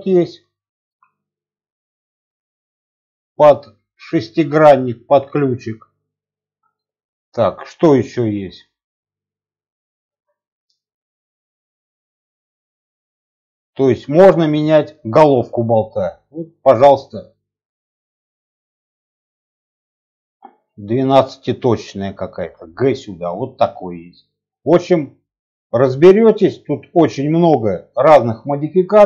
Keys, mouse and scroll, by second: 1.0 g, 2.3-2.8 middle drag, 2.8-3.5 scroll up 3, 4.0-4.5 scroll down 1, 4.5-5.8 middle drag, 5.7-6.2 scroll down 2, 6.2 middle click, 8.1 shift+a, 15.1-19.7 drag, 22.3 g, 23.4-25.0 middle drag, 25.7 shift+middle click, 26.0-26.7 scroll up 3, 26.4 middle click, 27.0 scroll down 1, 27.3 middle click, 27.8 shift+middle click, 28.1 scroll down 1, 28.3 scroll up 1, 28.4-29.0 middle drag.